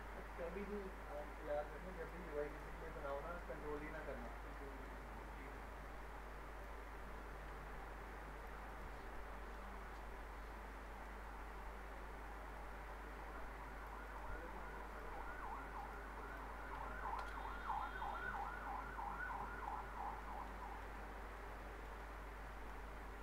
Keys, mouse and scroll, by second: 1.1 click, 2.5 right click, 2.8 middle click, 3.4-4.2 alt+middle drag, 6.6 click, 8.7 right click, 9.1-9.8 alt+middle click, 9.6-10.2 alt+scroll down 2, 10.2-10.9 scroll up 1, 10.9 middle click, 11.2-12.5 scroll up 1, 12.5 click, 14.0 right click, 14.9 click, 15.8 right click, 16.3 click, 17.2 ctrl+BackSpace, 18.0 scroll down 1, 18.1 alt+middle click, 18.6-19.3 scroll up 1, 19.3-19.9 middle click, 19.8 scroll down 1, 20.2 middle click, 20.6 middle click, 21.0-21.5 alt+middle click, 22.0-22.9 alt+middle click, 22.9-23.2 scroll up 1.